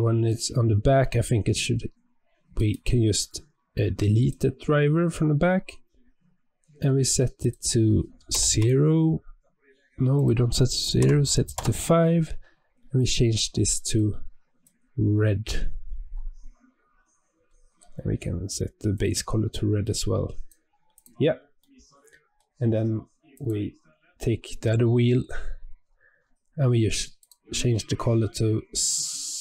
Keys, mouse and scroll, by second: 2.5-7.3 right drag, 7.3-12.9 drag, 17.3 scroll up 5, 18.1 scroll up 2, 18.8 click, 20.8 click, 21.5-23.2 middle drag, 23.2 click, 25.7-26.1 scroll up 7, 27.1-29.4 drag.